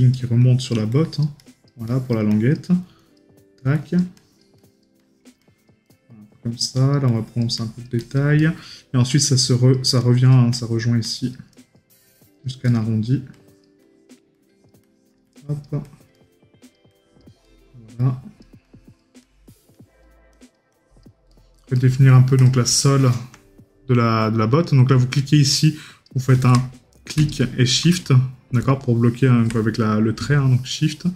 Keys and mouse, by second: 6.0 right click, 8.4 right click, 12.7 right click, 17.5 right click, 21.4 right click.